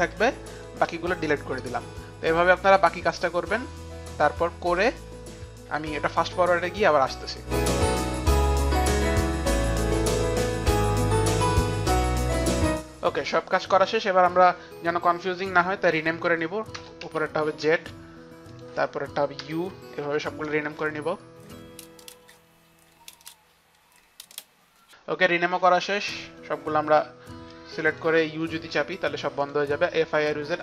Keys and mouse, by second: 0.2 click, 0.6 shift+click, 1.5 Delete, 1.5 shift+click, 3.0 Delete, 5.0 Delete, 7.5 click, 8.6 click, 8.7 shift+click, 8.9 Delete, 9.2 shift+click, 9.5 Delete, 9.8 shift+click, 10.5 Delete, 10.5 shift+click, 10.9 click, 11.0 shift+click, 11.5 shift+click, 12.7 Delete, 15.9 Delete, 16.7 Return, 17.1 Return, 17.1 z, 17.8 Return, 17.8 z, 18.5 click, 19.3 Return, 19.3 click, 19.3-25.3 typing, 20.1 click, 21.0 click, 21.4 click, 21.8 Return, 22.6 Return, 22.6 click, 22.8 click, 23.1 Return, 23.3 click, 25.3 Return, 25.3 click, 26.5 Return, 26.5 click, 26.5 f, 27.9 shift+click, 28.7 u, 29.5 shift+click.